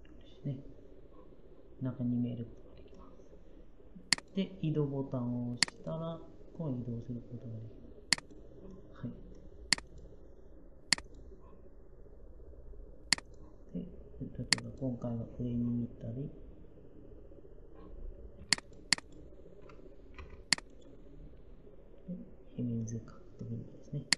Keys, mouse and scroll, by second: 20.0 m.